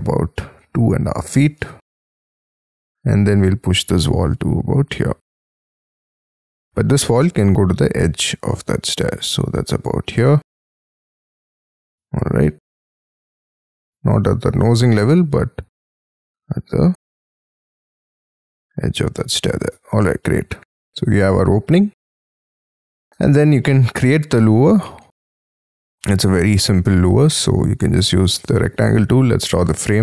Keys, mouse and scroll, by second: 0.5-3.2 typing, 5.1-5.5 scroll down 5, 5.5 middle click, 6.3-6.7 scroll up 5, 6.7 middle click, 8.5 y, 8.9 scroll up 4, 11.0 scroll up 6, 11.3 middle click, 11.8 y, 12.4 middle click, 13.0 middle click, 13.5-14.4 scroll up 5, 14.4 y, 15.6-16.0 scroll up 11, 18.3-19.1 scroll down 15, 19.1 space, 19.7 Escape, 19.7-20.6 scroll down 20, 20.7 middle click, 22.0 middle click, 22.1 scroll up 6, 22.3 shift+middle click, 23.7-24.2 scroll up 6, 24.2 scroll down 7, 25.0 middle click, 27.4 r, 29.6 Right.